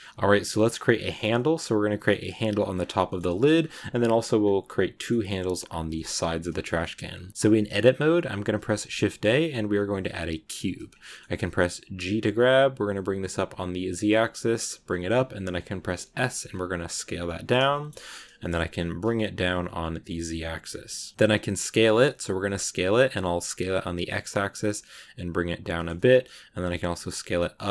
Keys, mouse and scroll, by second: 0.1 a, 0.4 middle click, 0.5 scroll up 2, 2.6 scroll down 2, 2.9 shift+middle click, 3.4-4.3 scroll up 2, 4.3-4.7 scroll down 2, 4.9-7.1 middle drag, 7.1 shift+a, 8.6 shift+a, 10.8 scroll down 1, 10.9-11.9 middle drag, 11.9 g, 17.6 shift+middle click, 17.9 scroll up 2, 18.1 middle click, 18.5 g, 20.8 middle click, 21.1 scroll up 3, 21.1 s, 25.9 middle click.